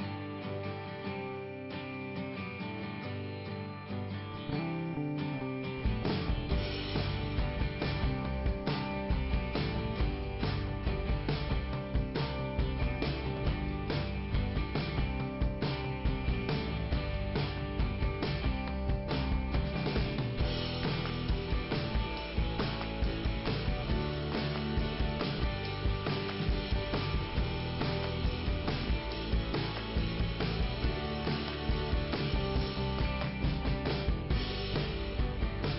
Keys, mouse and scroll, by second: 1.2 scroll up 2, 2.7 click, 5.3 click, 11.6 scroll down 2, 13.4 scroll up 2, 15.6 click, 18.2 click, 18.8 click, 19.4 click, 20.0 click, 20.8 scroll down 2, 24.5 click, 25.6 click, 26.2 click, 28.2 click, 31.8 click, 35.1 click.